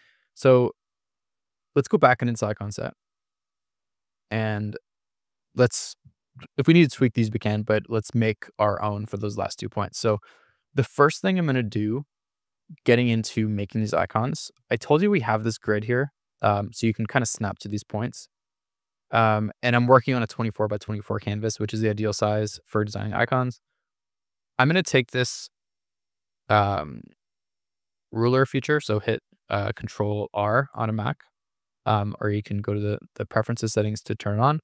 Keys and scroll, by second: 2.8 super+=, 5.0 super+=, 14.9 super+=, 18.9 super+-, 27.8 ctrl+r, 28.5 ctrl+r.